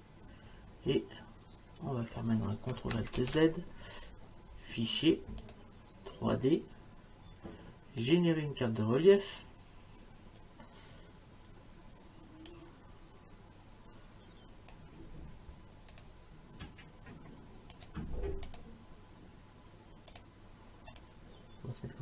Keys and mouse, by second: 3.2 ctrl+alt+z, 5.5 click, 8.0 click, 12.5 click, 16.0 click, 17.8 click, 20.1 click.